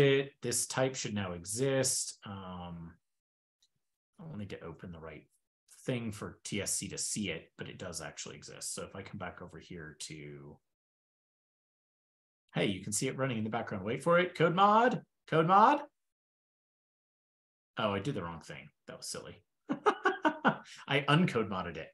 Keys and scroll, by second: 3.7 shift+super+], 4.7 super+w, 5.8 shift+super+[, 6.6 shift+super+], 18.3 ctrl+p, 19.0 ctrl+p, 20.1 super+Tab.